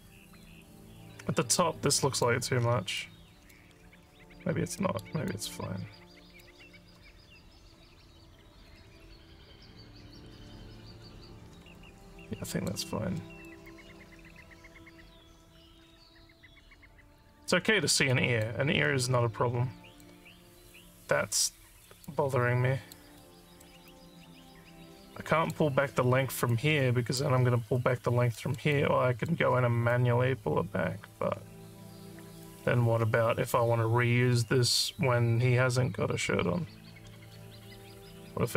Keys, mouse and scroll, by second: 0.1-2.2 alt+drag, 2.6 alt+scroll down 4, 2.7 alt+scroll up 1, 3.0 alt+middle click, 4.8 alt+middle click, 5.3-6.5 alt+drag, 11.7 alt+middle click, 12.2 alt+click, 13.2 alt+middle click, 13.7-17.4 alt+drag, 18.1 alt+click, 18.9-20.0 alt+drag, 22.1 alt+click, 23.3 alt+middle click, 23.8-25.6 alt+drag, 26.5 alt+click, 28.4 alt+middle click, 28.8 alt+click, 29.9-32.5 alt+drag, 37.8 alt+click.